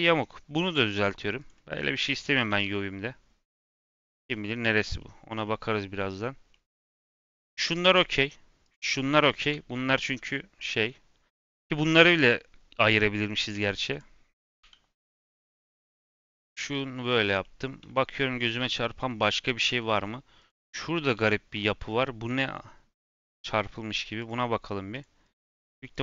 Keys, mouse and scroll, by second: 0.0 scroll up 1, 0.1-1.3 middle drag, 1.3-2.6 drag, 2.6 g, 4.1 g, 4.7 scroll down 2, 4.9 middle click, 5.1-5.9 scroll up 4, 5.4 middle drag, 5.9 middle click, 6.1 scroll down 1, 6.4-6.8 middle drag, 6.8 scroll up 2, 7.0-7.7 scroll down 1, 7.7 click, 8.6 click, 9.4 l, 10.9 scroll up 2, 13.4 click, 13.8 click, 14.5 l, 15.7-16.5 drag, 16.5 scroll down 2, 16.7 middle click, 17.6 scroll down 1, 17.9-19.6 middle drag, 19.6 n, 20.3 click, 21.1 l, 21.6 g, 24.1 click, 24.8 click, 25.2 click, 25.8 click.